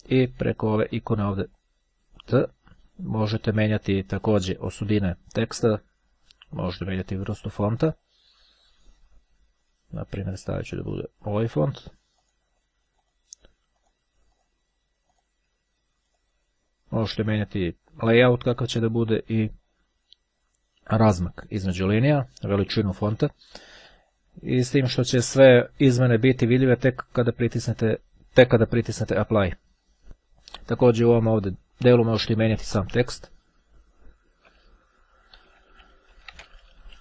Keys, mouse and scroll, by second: 2.1 click, 4.0 click, 6.9-8.0 drag, 10.6 click, 12.3 click, 13.7 click, 15.3 click, 16.3 click, 29.2 click, 32.5 space, 34.9-37.0 typing.